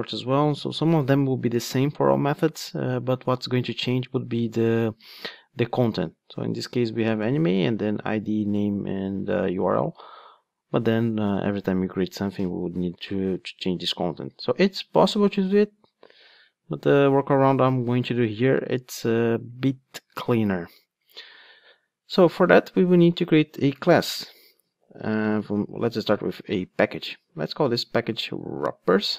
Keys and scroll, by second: 24.0 super+n.